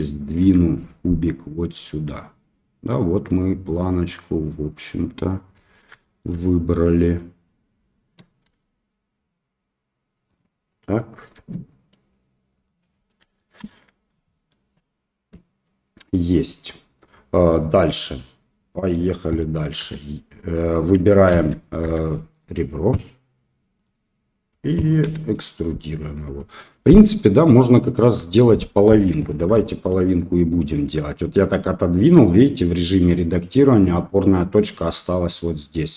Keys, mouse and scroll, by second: 0.4 g, 6.2 shift+click, 8.4 s, 11.3 g, 13.1 shift+middle click, 19.8 e, 21.3 ctrl+z, 21.8 2, 22.3 click, 23.7 click, 25.0 e, 29.1 Tab, 29.6 shift+middle drag.